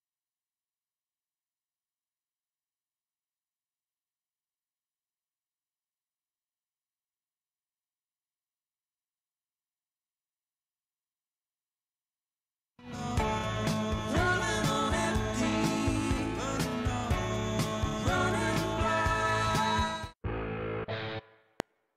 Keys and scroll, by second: 12.8 space, 19.8 space, 21.4 F7.